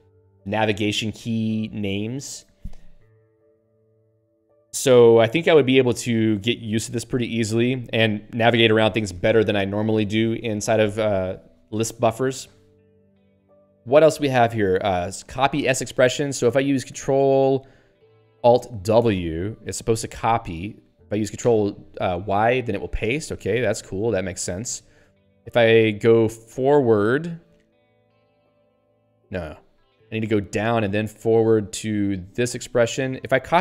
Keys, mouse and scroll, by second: 19.1 ctrl+alt+w, 20.2 ctrl+p, 21.4 ctrl+y, 24.0 ctrl+/, 24.9 ctrl+n, 28.5 ctrl+alt+f, 29.6 ctrl+alt+b, 30.4 ctrl+alt+d, 30.9 ctrl+alt+f.